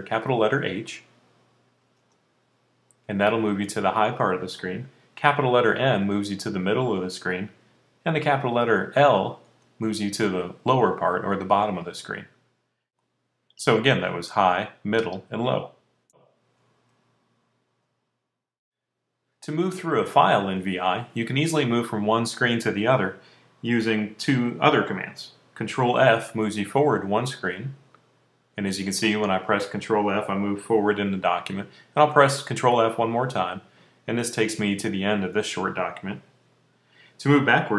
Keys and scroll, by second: 1.9 shift+h, 5.8-6.6 typing, 8.1-9.3 typing, 13.2-14.4 typing, 15.5 typing, 17.0-17.9 typing, 27.1 f, 33.0 f.